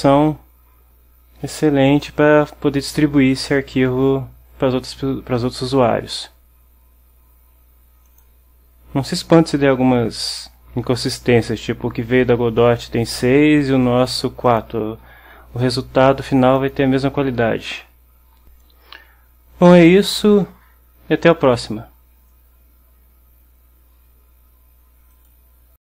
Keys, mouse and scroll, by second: 2.0 click, 8.2 click, 10.4 click, 14.6 click, 16.7 click.